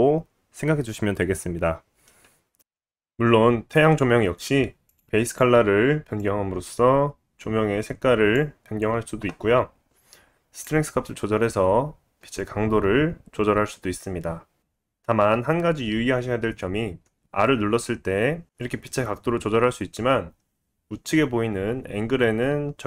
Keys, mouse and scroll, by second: 0.5 click, 0.6-1.4 scroll up 2, 0.9 click, 1.4-2.1 scroll down 1, 2.1-5.0 drag, 5.0 middle click, 5.2 click, 5.3-10.6 middle drag, 10.6-14.4 drag, 14.4-22.8 middle drag, 14.6 r.